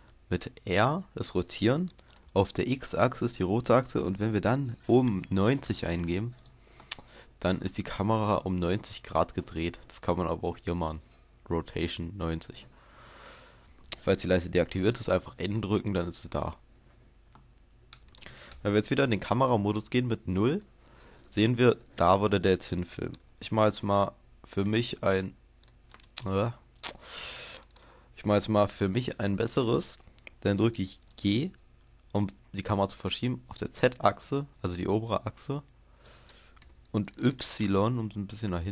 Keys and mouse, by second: 0.8 r, 6.4-10.5 drag, 10.5-15.6 middle drag, 15.6 n, 16.0 n, 19.5 KP_0, 23.4 g, 26.9-28.4 middle drag, 28.5-31.0 middle drag, 31.0 g, 36.1-38.7 drag, 37.1 g.